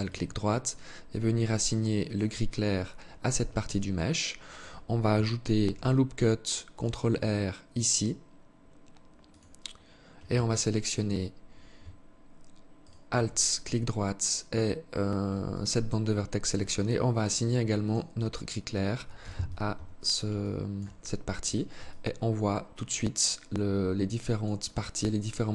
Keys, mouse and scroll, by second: 1.3 click, 2.9 alt+shift+click, 4.8 ctrl+r, 10.9 alt+scroll down 1, 12.0 alt+shift+right click, 14.7 alt+click, 17.0 click, 18.4 z, 18.9 Tab, 19.6 alt+click, 20.2-20.6 scroll down 4, 21.1 alt+click, 24.1 alt+click, 24.5 alt+click, 25.1 alt+click.